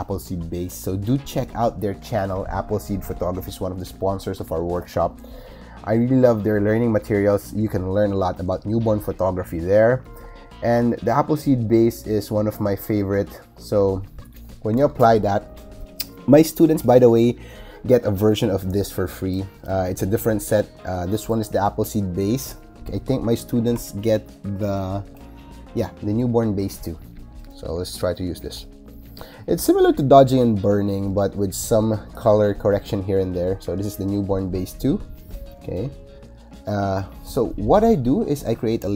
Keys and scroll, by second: 23.6 BackSpace.